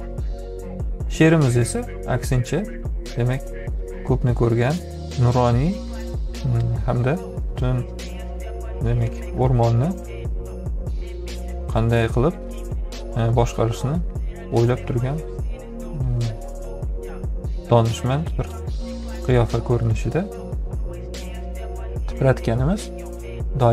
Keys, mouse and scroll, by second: 4.2-5.4 drag, 14.1-16.1 drag.